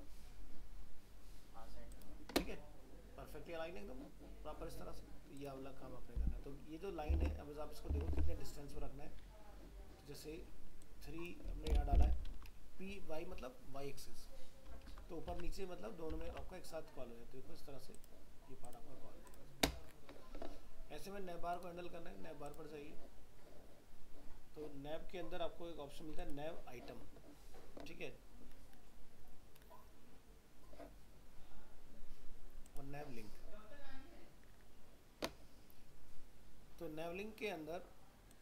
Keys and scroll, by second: 7.1 alt+Tab, 12.3 ctrl+s, 15.3 alt+Tab.